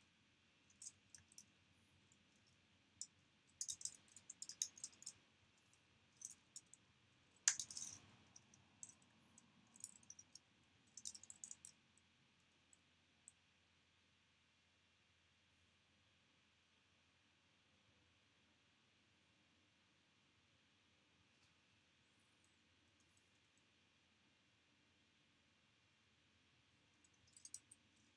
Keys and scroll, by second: 1.0 p, 3.2-7.3 typing, 5.4 super+], 8.1 super+[, 8.6-12.9 typing, 14.8-15.5 typing, 22.0-23.2 typing, 27.0 o.